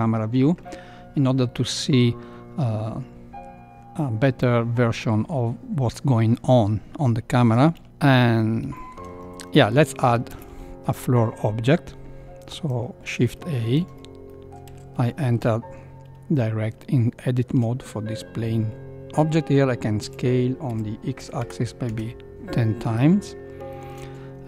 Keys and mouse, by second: 8.2 middle click, 8.8 shift+middle click, 9.6 shift+middle click, 10.3 shift+a, 13.3 shift+middle click, 14.3 middle click, 14.6 Tab, 15.1 shift+middle click, 16.8 shift+middle click, 20.0 s, 23.0 middle click, 23.7 shift+middle click.